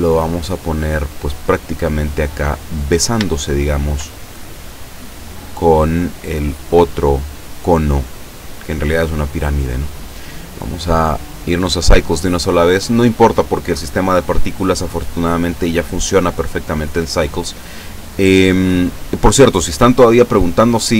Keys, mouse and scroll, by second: 2.8-3.2 scroll up 2, 3.4 shift+middle click, 4.2 shift+scroll up 1, 4.7 scroll down 2, 4.8 click, 6.1 click, 7.7 scroll down 1, 8.1-9.2 middle drag, 9.3 scroll down 1, 9.6 middle click, 10.9 click, 11.7 click.